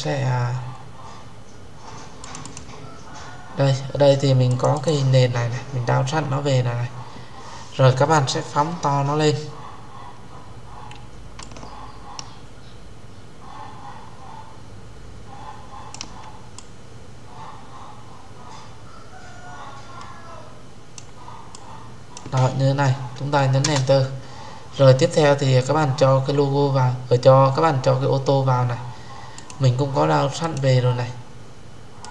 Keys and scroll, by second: 23.5 Return.